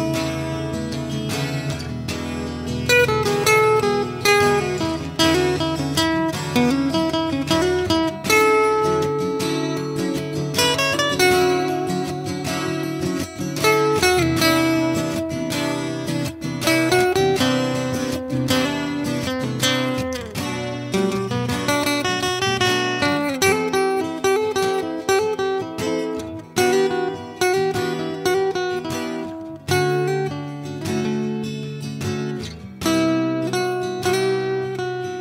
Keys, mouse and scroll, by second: 0.3 s, 0.7-3.9 drag, 3.9 middle click, 4.6-5.4 drag, 6.4-7.3 drag, 9.1 shift+d, 11.5 s, 11.9 ctrl+a, 12.1 click, 12.3 s, 12.8-13.4 drag, 13.7 ctrl+KP_Subtract, 13.9 a, 14.7 s, 14.9 click, 17.2 click, 17.8 right click, 18.1 s, 19.1 middle click, 19.5 a, 20.0-20.8 right drag, 20.8 middle click, 22.3 s, 23.2 s, 25.1-26.2 middle drag, 26.2 click, 26.5 Delete, 27.1-31.3 typing, 28.3 Tab, 29.6 Tab, 32.0 ctrl+KP_3, 32.7-35.0 typing.